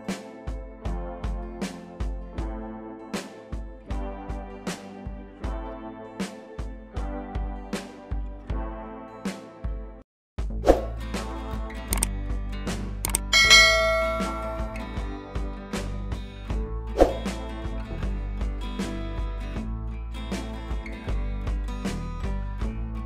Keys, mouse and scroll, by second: 1.4-2.9 drag, 4.7 scroll up 1, 5.2 space, 5.4 click, 5.7 space, 7.4 scroll down 1, 7.4 scroll up 1, 7.6 scroll down 1, 8.6 click, 18.4-22.8 drag.